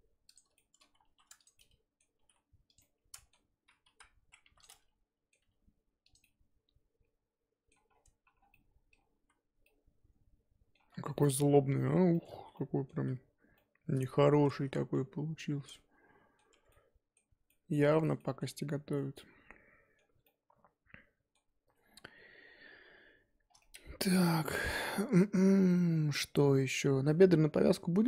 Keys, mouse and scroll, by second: 0.5 shift+middle click, 1.0 2, 1.4 click, 1.6 middle click, 2.2 g, 2.8 middle click, 3.8 KP_1, 4.4 1, 4.6 click, 4.7 middle click, 5.4 g, 6.2-7.9 middle drag, 7.9-8.5 scroll down 8, 8.0 Tab, 8.5 middle click, 9.2 z, 9.4 scroll down 2, 9.6-10.9 middle drag, 10.9-11.2 scroll down 1, 11.2 middle click, 11.5-12.1 scroll up 8, 12.1 shift+middle click, 12.3 z, 12.7 middle click, 12.9 z, 13.6-16.5 middle drag, 16.5 Tab, 16.7-18.4 middle drag, 18.4-19.0 scroll up 1, 19.0-23.4 middle drag, 23.4 scroll down 4, 23.6 middle click, 24.5 scroll down 1, 24.7-28.0 middle drag.